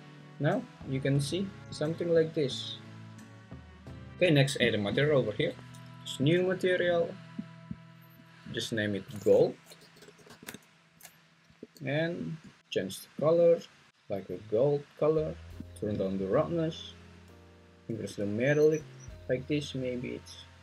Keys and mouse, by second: 4.1 g, 5.3 Escape, 9.6 click, 11.6 g, 15.9-17.2 drag, 18.2 click, 19.4 click.